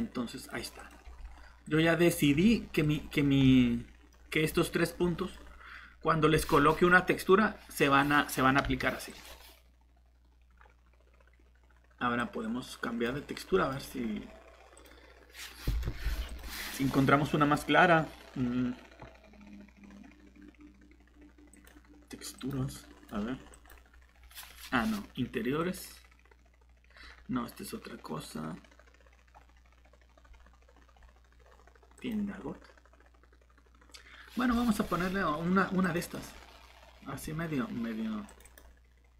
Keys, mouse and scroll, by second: 3.1 scroll up 1, 3.4 middle click, 8.0 click, 13.5 middle click, 13.7-14.7 scroll up 1, 14.7 click, 15.9 Escape, 17.5 scroll down 1, 21.5 click.